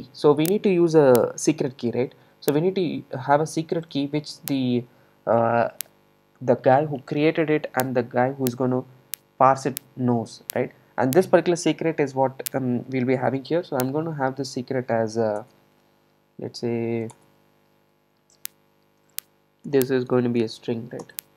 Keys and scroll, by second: 15.5 alt+Return, 21.1 Return.